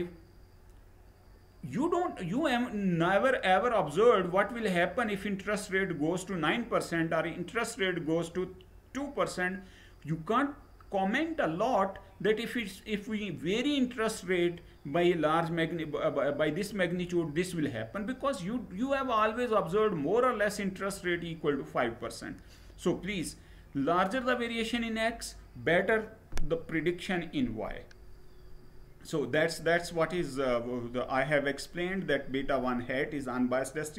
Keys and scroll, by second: 27.0 Right.